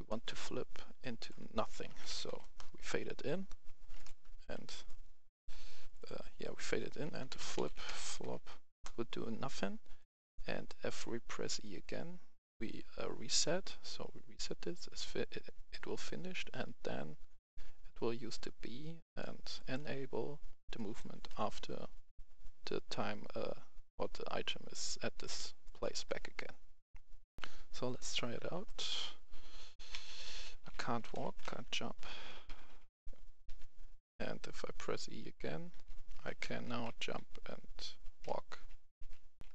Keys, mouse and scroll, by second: 0.0 right click, 0.9 click, 1.6-2.2 typing, 2.3 Return, 3.9 click, 4.3 Delete, 4.8 click, 7.0-8.1 typing, 7.3 click, 8.6 Return, 9.9 click, 10.6-13.4 right drag, 17.3-19.4 drag, 19.9 scroll up 1, 20.7 right click, 27.2 click, 27.3 F10, 27.9 click, 28.7-33.4 typing, 35.4-36.2 typing, 37.4-38.8 typing, 39.3 click, 39.3 F10.